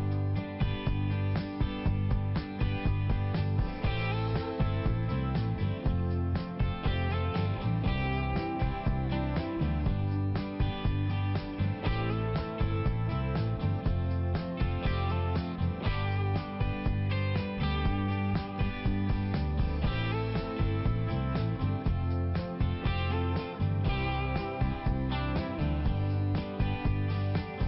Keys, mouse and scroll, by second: 1.4 click, 2.5 click, 4.3 click, 5.2 click, 5.5 click, 7.1 click, 8.4 click, 15.0 click, 23.3 click.